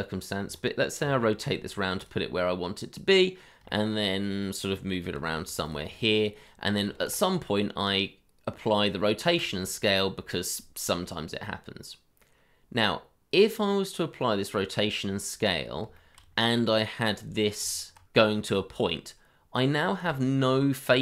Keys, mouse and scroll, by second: 1.0 r, 2.3 scroll down 1, 2.9 middle click, 3.7 shift+middle click, 4.3 middle click, 5.1 g, 5.9 shift+middle click, 10.3 middle click, 16.0 shift+middle click, 16.5 middle click, 17.3 scroll up 1, 17.6 Tab, 19.5 scroll down 1, 19.9 middle click, 20.6 shift+middle click.